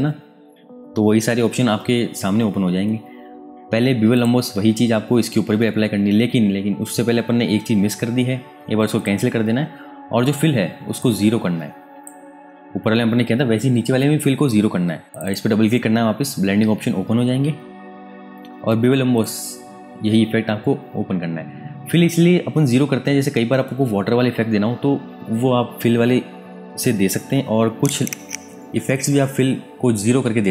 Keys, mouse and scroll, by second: 4.1 click, 8.9 click, 15.1 click, 19.1 click.